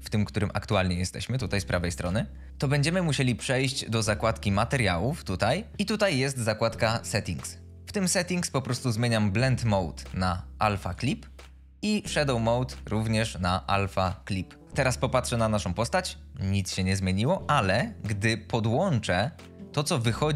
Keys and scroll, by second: 14.6 F22.